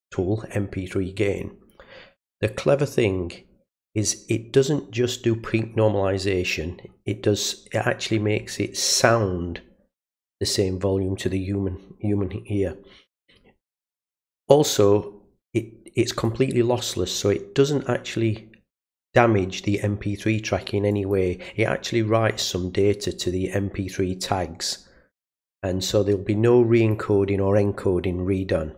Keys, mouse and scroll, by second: 2.3-3.7 drag, 13.7 click, 16.2 click, 20.9 click, 23.2-26.9 drag.